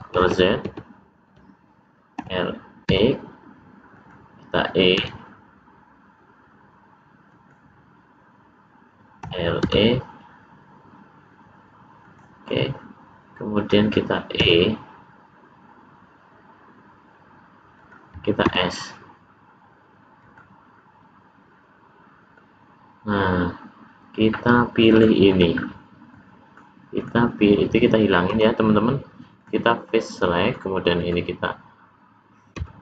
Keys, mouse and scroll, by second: 0.1 ctrl+z, 0.6 ctrl+z, 2.1 r, 4.9 e, 9.1 r, 14.4 e, 18.4 s, 22.4 middle click, 25.7-26.1 scroll up 2, 26.1 middle click, 27.0 click, 28.3 x, 29.8 middle click, 30.9 click, 32.5 x.